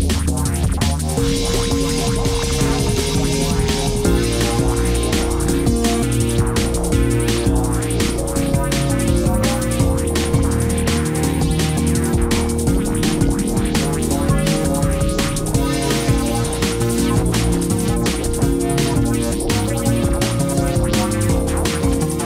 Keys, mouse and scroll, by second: 4.7 ctrl+j, 13.4 ctrl+z.